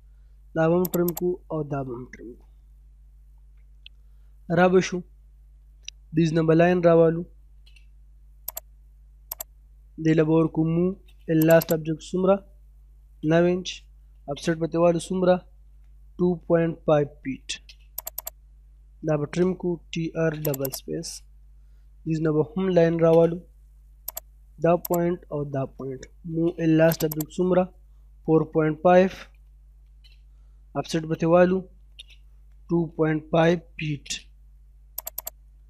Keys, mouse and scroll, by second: 0.0-0.4 scroll down 1, 0.9 click, 1.4-2.1 scroll down 1, 2.1 middle click, 5.3-6.0 scroll up 1, 6.0 k, 7.3 space, 7.6-7.9 scroll up 1, 8.5 click, 10.6 m, 10.8 space, 11.0 l, 11.2 space, 11.4 right click, 11.7 click, 12.8 9, 13.8 o, 14.0 space, 15.3 2, 17.4 space, 18.0 click, 19.4-20.3 typing, 20.4 click, 21.0 scroll down 1, 21.2 middle click, 21.6-22.2 scroll up 1, 22.6 l, 22.8 space, 22.9-23.5 scroll up 1, 24.1 click, 26.0 m, 26.1 space, 26.3 l, 26.5 space, 26.9 right click, 27.1 click, 28.4 typing, 29.6 space, 31.5-32.0 typing, 33.7 space, 33.9 middle click, 35.0 click, 35.5-35.6 scroll down 1.